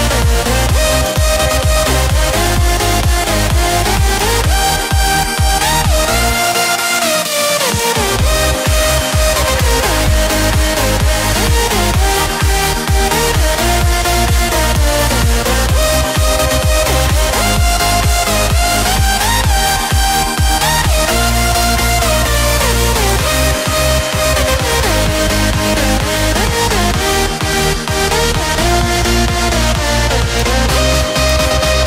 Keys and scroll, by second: 2.3 ctrl+t, 5.5 ctrl+z, 11.9 Return.